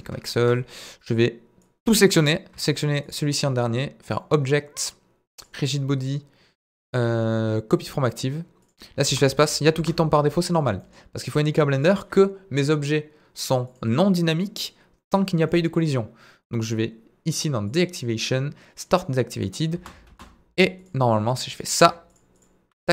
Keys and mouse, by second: 0.4 KP_1, 1.6 click, 4.1-7.9 drag, 9.1 space, 9.5 middle drag, 9.8 space, 10.5 click, 10.8 middle click, 11.1 click, 11.7 click, 15.5 middle click, 17.3 click, 17.7 click, 18.8 click, 19.7 space, 20.1 space, 20.9 click, 21.3 click.